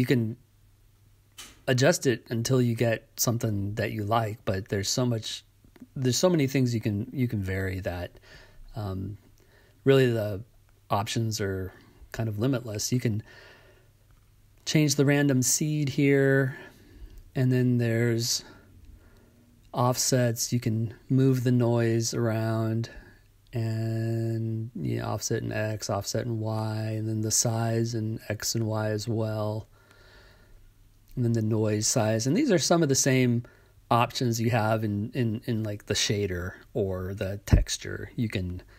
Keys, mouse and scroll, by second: 1.0-2.6 drag, 3.9-5.8 drag, 7.4-9.0 drag, 11.4-12.8 right drag, 17.9 click, 19.2 click, 20.9 click, 22.2 click, 24.7-26.4 right drag, 30.6 click, 31.3 click, 32.9-35.0 drag, 35.6-38.7 drag.